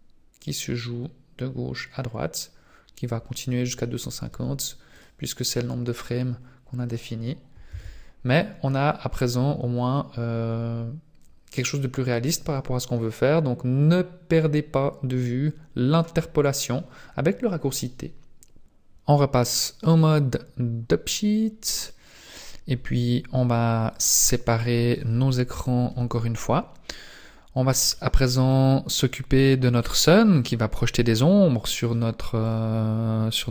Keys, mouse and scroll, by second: 22.0 click, 23.9 click, 25.8 n, 27.9 middle click, 28.9 right click, 29.4 middle click, 30.7 scroll up 1, 31.9 click, 32.9-33.5 scroll up 1.